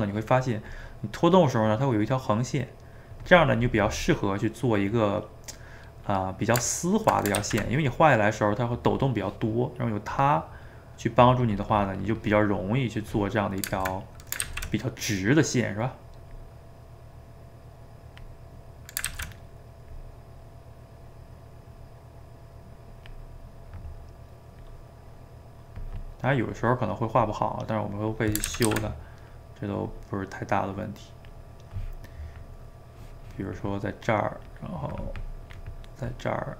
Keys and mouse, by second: 0.7-3.7 drag, 4.7-7.4 middle drag, 7.4 ctrl+z, 10.1-12.7 drag, 12.7-14.4 middle drag, 14.4 ctrl+z, 15.0-16.3 middle drag, 16.3-18.4 drag, 18.4 middle click, 19.1 ctrl+z, 19.3 middle click, 19.9-23.0 drag, 23.4-24.6 middle drag, 24.6-26.3 drag, 26.3 middle click, 27.2-28.5 drag, 28.5 ctrl+z, 28.7 ctrl+z, 29.0 middle click, 29.8-31.5 drag, 31.5-34.5 middle drag, 34.5-35.8 drag, 35.8-36.5 middle drag.